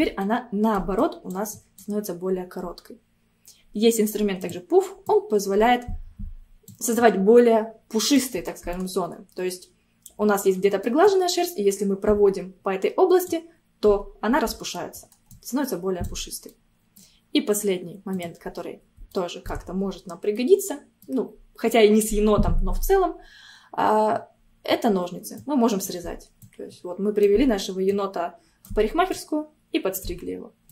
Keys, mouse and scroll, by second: 0.2 middle click, 1.0-8.5 drag, 8.5-10.4 middle drag, 10.4 scroll down 1, 10.6 middle click, 11.1-14.2 drag, 14.5 middle click, 15.0-15.4 scroll up 2, 15.4 click, 16.3 scroll down 1, 16.5-18.1 middle drag, 18.1 click, 19.1 shift+middle click, 19.9 scroll up 1, 20.4-23.4 middle drag, 25.4-30.7 drag.